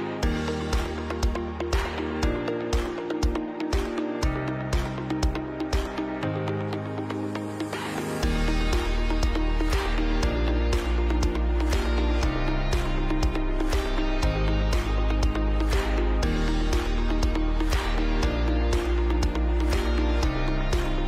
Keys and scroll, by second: 4.6 space, 6.7 ctrl+alt+space, 8.5 ctrl+alt+b, 8.8-10.0 typing, 13.3 space, 13.8 ctrl+alt+space, 18.1-20.0 typing.